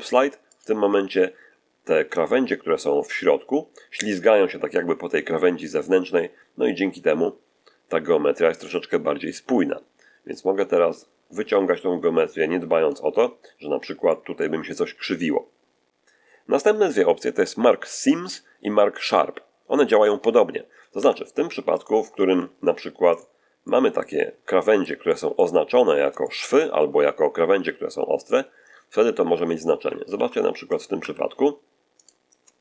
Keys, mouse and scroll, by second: 0.4 click, 10.2-13.0 drag, 13.6 scroll down 1, 13.9 middle click, 20.8 Tab, 21.3 x, 21.6 shift+click, 22.0 shift+a, 23.0 click, 23.5-24.1 middle drag, 24.3 middle click, 26.1-26.6 shift+middle drag, 29.2 Tab, 29.9 ctrl+r, 30.6 ctrl+click, 30.9 Escape.